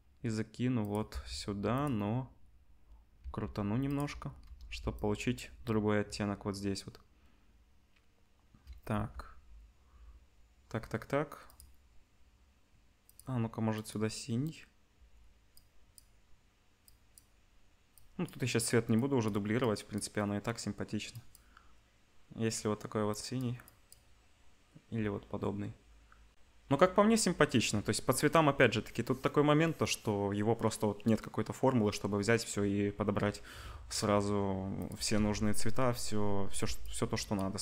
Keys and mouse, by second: 1.1 r, 3.2 r, 4.6 ctrl+b, 8.9 g, 13.0 click, 34.8 click, 34.9-37.6 middle drag, 35.1 z, 36.5 ctrl+b.